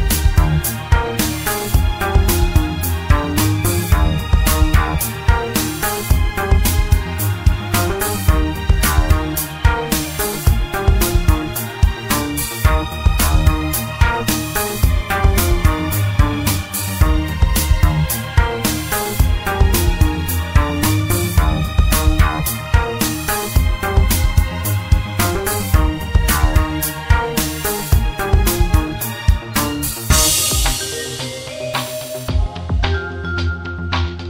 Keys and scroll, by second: 0.3-0.8 typing, 1.9-3.9 typing, 4.4 Return, 5.5-6.9 typing, 7.0 Return, 8.6-9.3 typing.